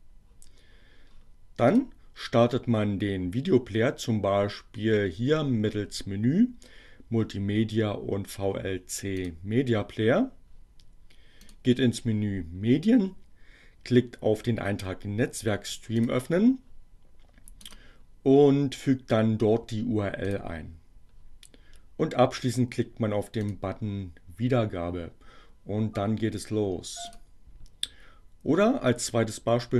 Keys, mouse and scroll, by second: 1.5 click, 8.8 click, 11.5 click, 14.1-16.3 drag, 17.4 right click, 19.0-20.6 drag, 22.7-23.7 drag, 27.1 click.